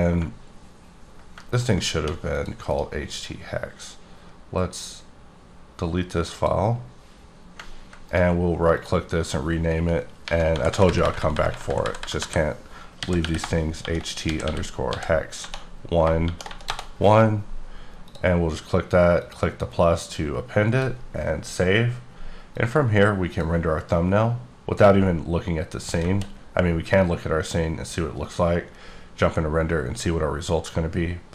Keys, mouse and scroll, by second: 1.5 ctrl+click, 2.7 right click, 6.3 click, 8.1 right click, 8.7 click, 10.2 Home, 13.0-16.5 typing, 16.7 Return, 18.0 click, 19.2 click, 20.1 click, 22.5 click, 26.0 KP_0, 28.2 click.